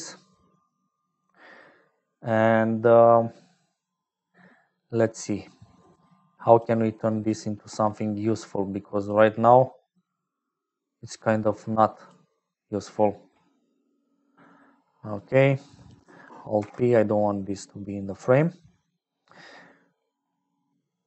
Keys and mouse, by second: 0.0-21.0 typing, 3.5 click, 5.3 click, 6.2 click, 7.0 click, 8.3 click, 10.6-12.0 drag, 13.0 click, 13.9 click, 15.1 click, 16.5 alt+p, 17.9 click.